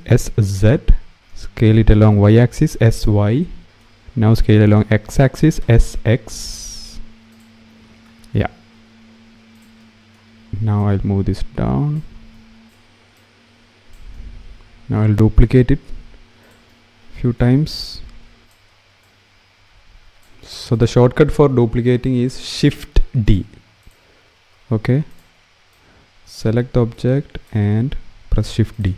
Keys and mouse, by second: 0.0 z, 2.3 s, 2.8 y, 5.3 s, 5.7 x, 8.1 s, 8.5 y, 9.3 click, 10.5 click, 13.9 shift+d, 15.3 r, 15.6 z, 18.4 shift+d, 20.4 click, 22.2 click, 24.8 shift+d.